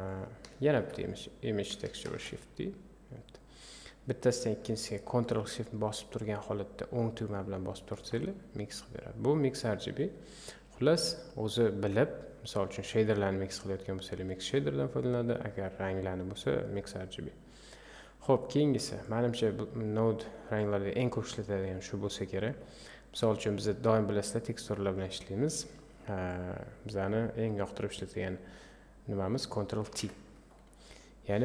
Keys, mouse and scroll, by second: 0.1 click, 2.1 shift+d, 7.9-9.0 ctrl+shift+right drag, 9.0-11.5 drag, 11.8 Delete, 12.5-15.1 drag, 19.0-20.6 drag, 22.0-26.4 drag, 29.9 ctrl+t.